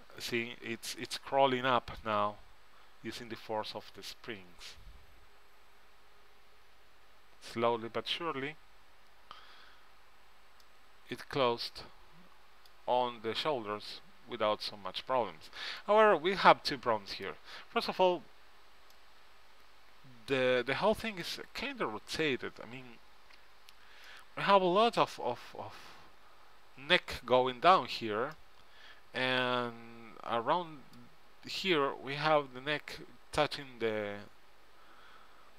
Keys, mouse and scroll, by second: 1.7-2.9 middle drag, 12.2 middle click, 17.0 middle click, 20.9-21.9 middle drag.